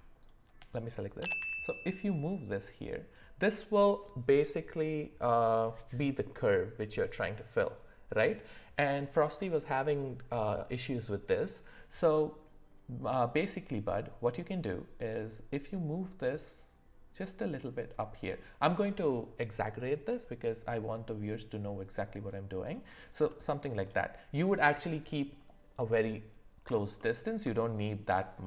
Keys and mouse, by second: 0.2 shift+click, 1.4 g, 23.3 middle click, 28.1 g.